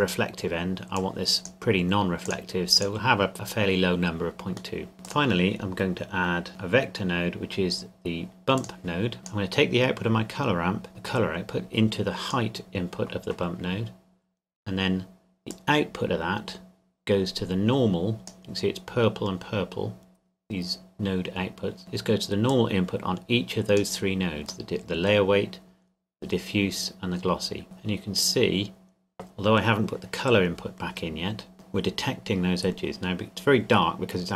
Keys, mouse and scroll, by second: 1.0 click, 4.8 middle click, 5.0 click, 8.6 click, 15.5 click, 21.8 click, 24.9 middle click, 27.8-30.1 scroll up 2, 31.2 scroll up 1, 34.0-34.3 scroll up 1.